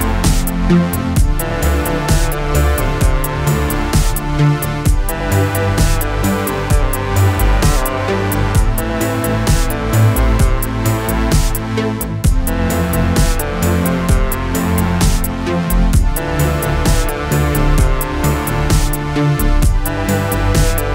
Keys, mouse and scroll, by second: 3.7 s, 4.4 click, 7.1 click, 9.6 click, 11.3 shift+click, 12.9 click, 14.4 click, 16.9 alt+Num_Lock, 18.1-19.2 alt+click, 20.3 s.